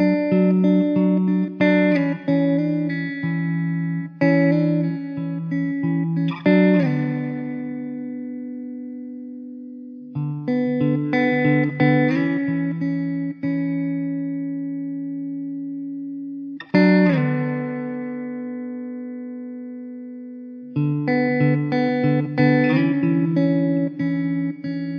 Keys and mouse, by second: 5.8 middle click, 12.2 middle click, 24.0 alt+w.